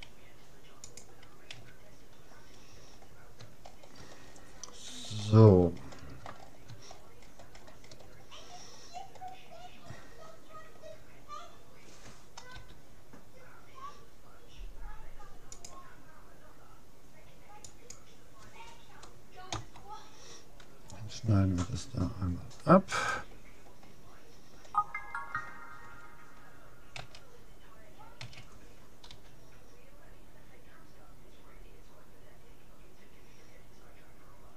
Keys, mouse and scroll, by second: 1.6 a, 1.9 middle click, 3.6-4.6 scroll down 1, 4.6-6.4 middle drag, 6.4 scroll up 1, 6.4-10.2 middle drag, 10.2-11.2 scroll down 1, 11.2-12.2 middle drag, 12.6 k, 21.6 middle click, 23.0-24.6 right drag, 27.0 a, 28.2 a, 29.2 g.